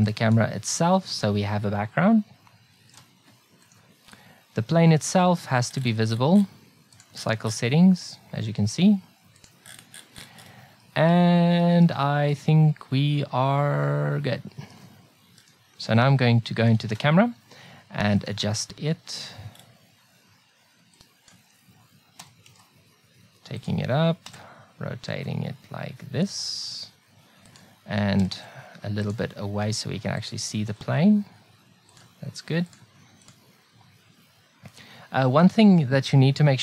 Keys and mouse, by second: 1.3-2.4 middle drag, 2.8 middle click, 3.7-6.9 middle drag, 9.7-11.2 middle drag, 11.6 middle click, 11.8 middle click, 12.4 middle click, 13.1 middle click, 16.9 KP_0, 19.6 click, 22.2 g, 24.3 r, 28.2 r, 29.4 r, 30.7 r, 32.7 click, 33.0 click.